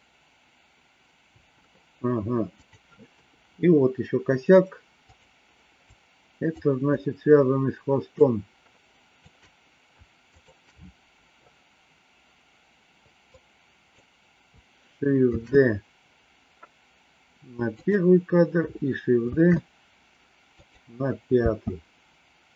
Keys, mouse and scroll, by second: 1.3 space, 3.1 KP_3, 5.1 click, 5.9 click, 8.1 shift+click, 10.1 shift+click, 13.2 click, 15.3 shift+d, 19.3 shift+d, 21.4 space.